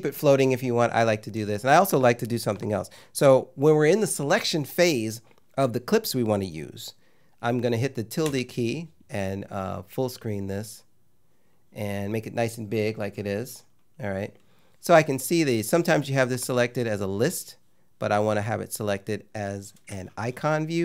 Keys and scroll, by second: 8.3 `.